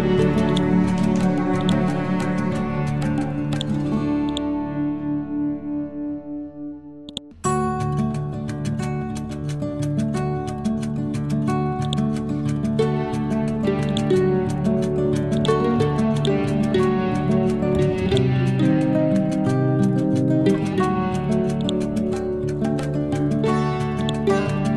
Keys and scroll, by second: 7.5 Down.